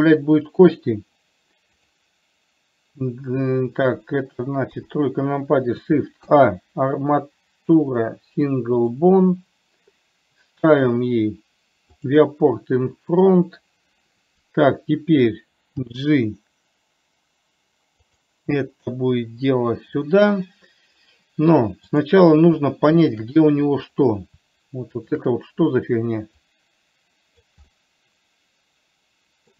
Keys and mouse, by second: 2.1 click, 5.1 KP_3, 6.5 shift+a, 12.2 click, 13.6 click, 16.2 g, 22.2 click, 23.3 shift+click, 25.3 shift+click, 26.8-27.8 drag, 28.0-29.5 middle drag.